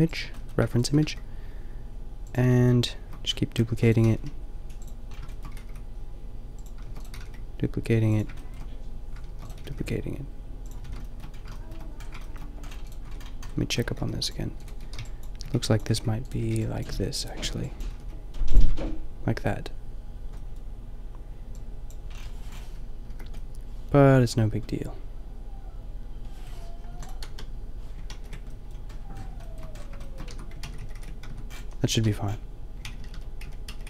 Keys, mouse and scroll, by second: 0.0 drag, 0.6 shift+d, 0.8 click, 1.0 g, 3.7 shift+d, 3.9-4.9 drag, 4.1 g, 5.5 g, 6.8 shift+d, 7.1 g, 9.3 shift+d, 9.6 g, 10.8 a, 13.0 Tab, 13.2 middle click, 13.4 middle click, 13.5 a, 13.9 ctrl+r, 14.6-17.9 typing, 18.6 Tab, 18.8 middle click, 22.6 middle click, 23.0 KP_4, 25.7-26.3 middle drag, 26.8 Delete, 27.2 KP_0, 28.1 ctrl+z, 30.2 Tab, 30.6 ctrl+z, 31.2 ctrl+z, 31.2 Tab, 31.6 a, 32.0 Tab, 32.8-33.8 ctrl+z.